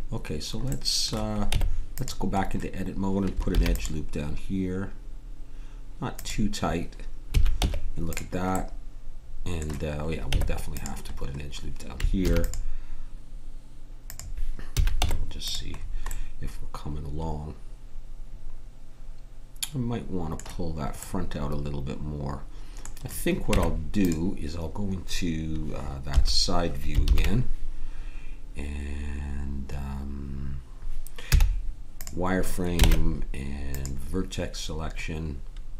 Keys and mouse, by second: 1.5 Tab, 3.5 ctrl+r, 7.6 Tab, 7.6 a, 10.3 Tab, 12.1 ctrl+r, 14.7 a, 14.9 Tab, 20.5 middle click, 23.5 Tab, 26.1 KP_3, 31.3 z, 32.8 ctrl+Tab.